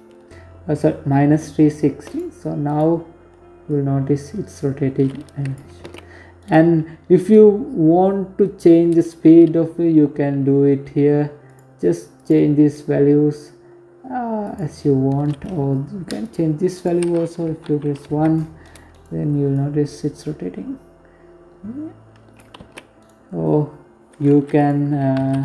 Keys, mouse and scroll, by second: 0.6 right click, 1.2 right click, 2.2 click, 4.3 ctrl+z, 4.9 right click, 8.4-9.0 scroll down 1, 9.0-9.9 scroll down 2, 9.9 scroll down 1, 10.0 click, 15.3 click, 17.1 right click, 17.4 right click, 18.0 click, 21.2 ctrl+z, 21.5 right click, 22.6-23.1 scroll up 1, 23.1 click, 24.8-25.4 scroll down 3.